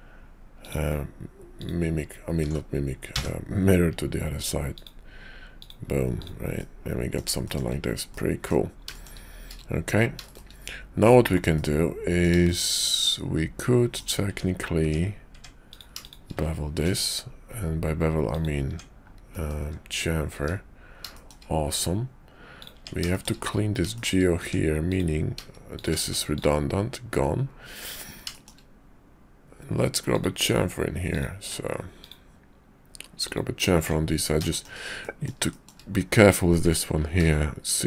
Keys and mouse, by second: 0.6 click, 1.6 click, 2.4 alt+x, 6.2 click, 6.6 middle click, 7.4 shift+middle click, 8.1 middle click, 8.9 shift+middle click, 11.5 middle click, 13.0-14.0 middle drag, 14.2 Tab, 14.8 Tab, 15.4 Tab, 16.0 shift+click, 16.7 ctrl+b, 18.6 Tab, 19.2 middle click, 19.6 `, 20.3 `, 21.2 shift+click, 22.8 Tab, 23.1 shift+click, 24.4 Tab, 25.6 shift+click, 25.9 x, 28.3 shift+click, 30.0 click, 31.9 ctrl+click, 34.5 shift+click, 35.0 middle click, 36.9 ctrl+b.